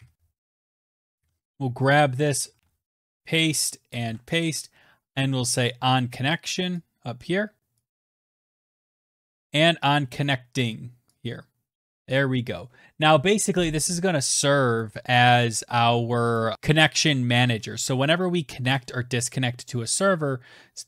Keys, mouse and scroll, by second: 0.3 click, 0.8 Return, 1.0 ctrl+v, 1.7 click, 2.3 Return, 2.4 ctrl+v, 4.7 click, 6.1 click, 6.4 click, 6.8 shift+click, 7.2 c, 8.6 click, 10.1 click, 10.1-12.0 typing, 13.2 click, 14.7 click, 16.5 Return, 17.1 click, 17.2 Return.